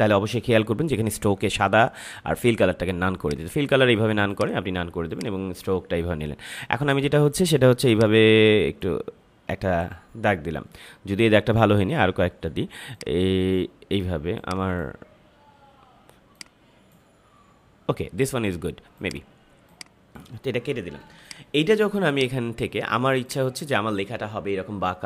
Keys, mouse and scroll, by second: 3.2 click, 7.8-12.9 drag, 12.9-18.9 drag, 18.9 click, 20.2 Delete, 21.0 space, 21.2 click, 21.5 space, 22.1-25.0 drag.